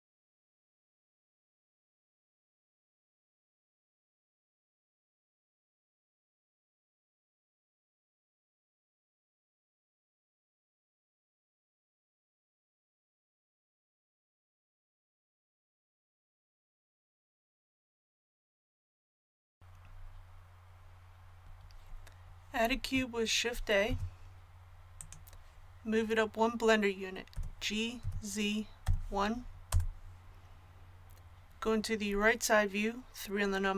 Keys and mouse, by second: 0.6 click, 0.9 z, 1.0 a, 1.7 ctrl+z, 2.4 z, 2.5 click, 3.3 click, 3.9 click, 5.8-11.3 middle drag, 8.2 l, 8.8 l, 11.3-13.3 drag, 16.1 KP_1, 18.0 a, 19.8-23.8 middle drag, 23.8 shift+a, 27.3 g.